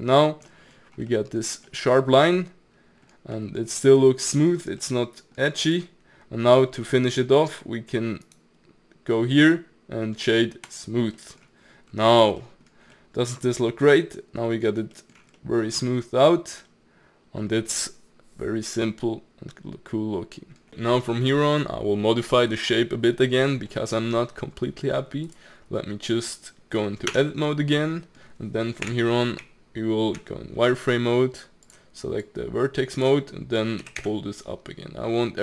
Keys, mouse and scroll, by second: 0.1-0.5 scroll down 1, 0.5 middle click, 0.8-1.1 scroll up 2, 1.1-3.1 middle drag, 3.1 scroll down 1, 3.4 middle click, 3.7-4.1 scroll down 1, 4.1-5.6 middle drag, 5.6-6.9 right drag, 6.9-8.3 middle drag, 8.3-11.2 right drag, 11.2-11.9 middle drag, 11.9 scroll down 1, 12.1 click, 12.4 middle drag, 12.7-13.0 scroll up 2, 13.0-15.2 middle drag, 15.2 scroll down 1, 15.4-18.4 middle drag, 20.7 n, 23.7-25.3 middle drag, 25.3 click, 27.1 Tab, 27.8-28.8 middle drag, 28.8 KP_1, 29.4 z, 31.7 click, 33.9 g.